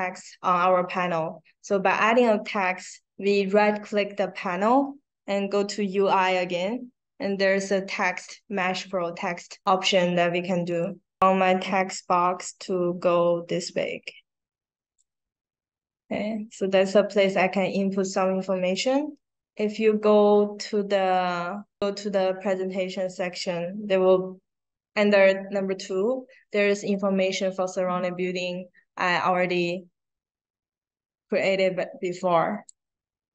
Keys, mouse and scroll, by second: 0.6 right click, 10.6 click, 11.9-14.9 drag, 19.6 click, 20.8 middle click, 21.0 scroll down 2, 21.0 middle click, 21.6 scroll up 1, 22.8-23.2 scroll up 2, 26.8 click, 29.6-32.6 drag.